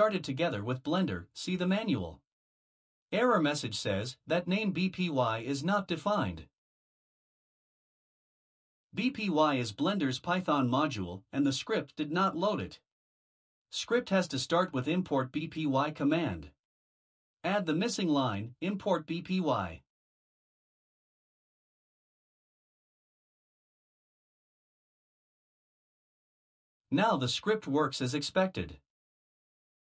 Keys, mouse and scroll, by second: 7.9 click, 9.7 Return, 10.5 Return, 11.7 click, 13.4-17.6 typing, 21.8 click, 23.0 Return, 24.7 click, 25.5 Return, 29.2 click.